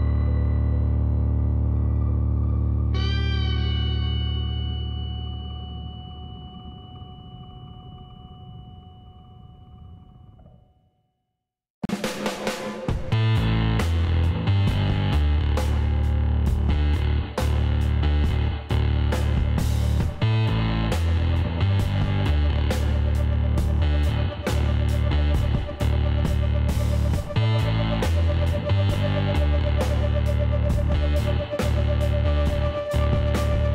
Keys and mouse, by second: 0.5 Tab, 1.2-2.6 middle drag, 4.7-5.8 middle drag, 6.9 Tab, 7.2 middle click, 7.6 a, 8.0-9.4 drag, 9.4-10.7 middle drag, 12.6-14.2 drag, 14.2-16.3 middle drag, 16.3-18.3 drag, 18.6-22.5 middle drag, 22.5-27.6 drag, 25.1 ctrl+z, 26.6 ctrl+z, 27.6-29.2 middle drag, 29.2 KP_Divide, 31.8 KP_1, 33.1-33.7 middle drag.